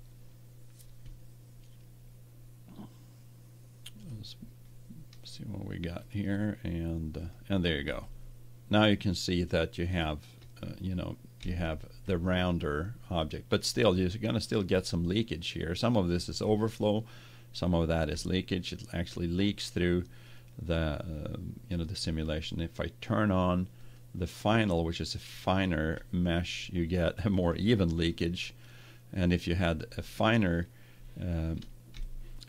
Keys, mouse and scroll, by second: 3.9-5.6 drag, 5.9-8.1 drag, 9.1 middle click, 10.6-19.9 middle drag, 20.2 click, 22.6 click, 23.7-25.7 drag, 26.6-30.4 middle drag, 32.0-32.4 middle drag.